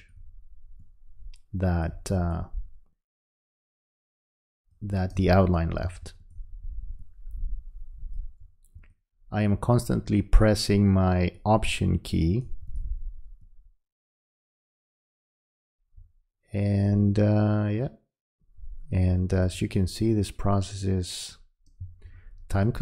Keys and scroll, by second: 5.2 space, 21.8 space.